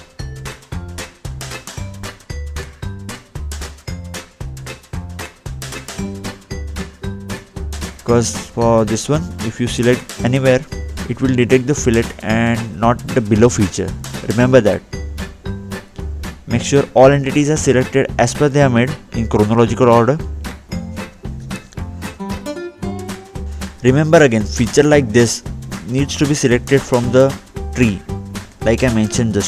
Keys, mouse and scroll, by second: 0.5-0.9 scroll down 1, 2.1 click, 2.9-3.3 scroll up 2, 3.9 middle click, 4.3-4.7 scroll down 2, 7.0-7.8 scroll up 2, 8.0-8.3 scroll down 2, 9.2 click, 12.6 scroll up 2, 15.5 click, 17.1 scroll down 2, 17.7 middle click, 18.0 scroll up 2, 18.5 scroll down 2, 20.2 scroll down 1, 21.4-22.0 scroll up 2, 22.0-22.3 scroll down 2, 22.8 click, 25.9-26.7 scroll up 2, 26.7 scroll up 1, 26.9-28.0 scroll down 2, 28.0 click, 28.8 scroll down 2.